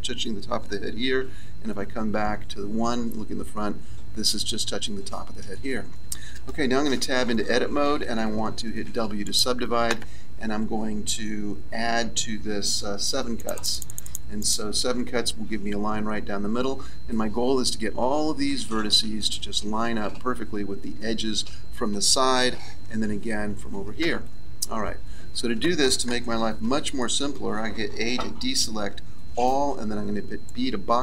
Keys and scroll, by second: 1.0 KP_1, 6.9 Tab, 8.8 w, 22.6 KP_3, 24.1 KP_1, 26.6 a, 29.7 b.